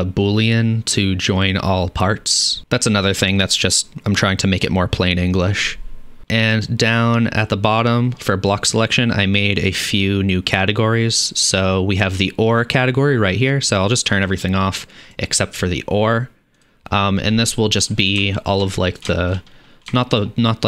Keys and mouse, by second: 4.3-13.6 middle drag, 13.6-17.3 drag, 17.7 click, 19.3 shift+drag.